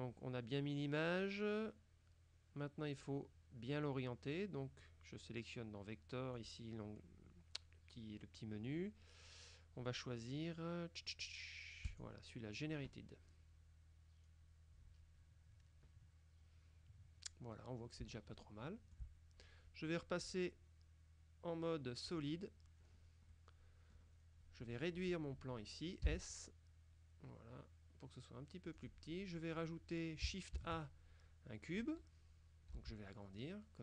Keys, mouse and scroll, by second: 6.4 click, 11.9 click, 14.3-14.8 scroll down 2, 18.2-19.5 shift+middle drag, 20.3 click, 22.1 click, 22.9-23.4 scroll down 1, 23.4 middle click, 24.3-24.8 scroll down 2, 24.9 right click, 26.1 s, 28.9 click, 30.7 shift+a, 31.8 click, 32.8 s.